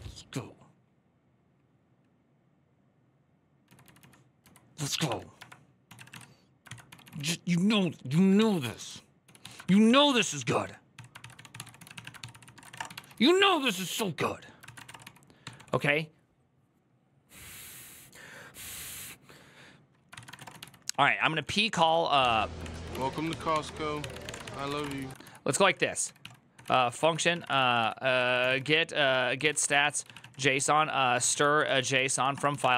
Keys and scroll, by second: 4.9-5.2 typing, 6.4-15.4 typing, 19.8-32.7 typing, 22.4 ctrl+c.